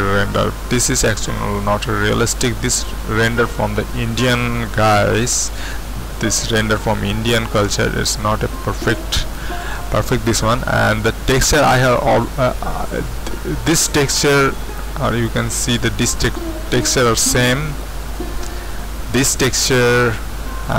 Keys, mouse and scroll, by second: 16.9-17.5 scroll down 2, 17.5-20.0 middle drag, 20.0-20.4 scroll down 2, 20.4-20.7 middle drag.